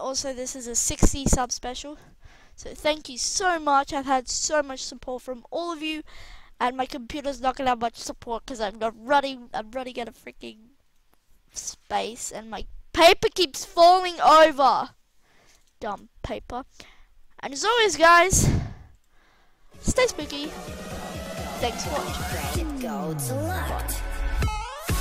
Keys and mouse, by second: 0.1 middle click, 0.8 KP_1, 1.2 KP_0, 2.3 a, 5.7-6.7 middle drag, 14.2 click, 15.7 shift+c, 19.5 r, 20.6 click, 20.9-21.7 middle drag, 22.8 middle click, 23.0 middle click, 23.6-25.0 middle drag.